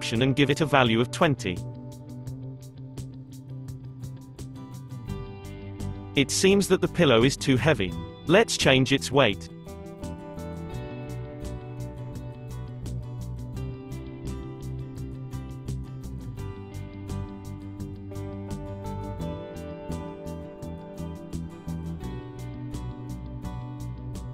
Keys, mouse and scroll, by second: 0.4-3.4 drag, 3.7 space, 5.0 space, 6.8-7.6 scroll up 5, 8.5-10.0 drag, 10.0-11.4 scroll up 5, 11.4-14.5 drag, 15.5 space, 17.0 space, 18.0-18.8 scroll down 2, 18.8-19.6 scroll up 5, 19.6-22.6 drag, 22.9-24.3 drag.